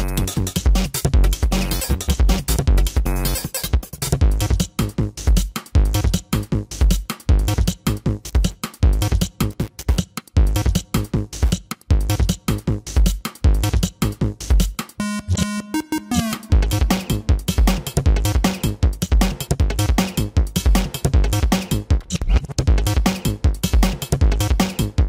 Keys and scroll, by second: 0.2 space, 2.4 ctrl+-, 4.3 ctrl+-, 4.5 ], 6.4 ], 7.0 space, 7.8 space, 8.2 ], 9.4 ], 10.2 ], 10.6 ctrl+=, 12.0 ctrl+-, 12.1 space, 13.9 ctrl+-.